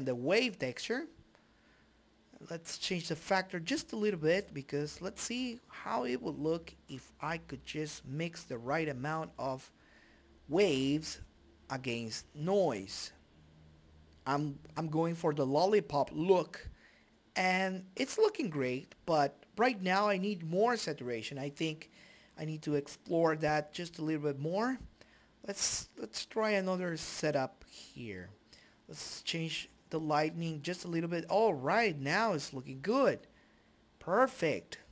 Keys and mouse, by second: 1.5 click, 2.1-3.2 drag, 4.8 click, 9.2 click, 11.5-12.8 drag, 13.5 Escape, 22.4-27.4 drag.